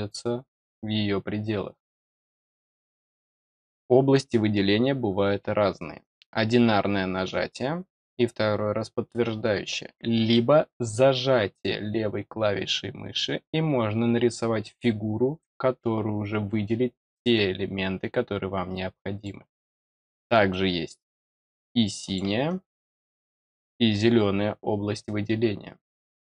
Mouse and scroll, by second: 3.0-3.4 middle drag, 6.0 click, 10.3-19.2 drag, 20.4-22.1 drag, 22.4 click.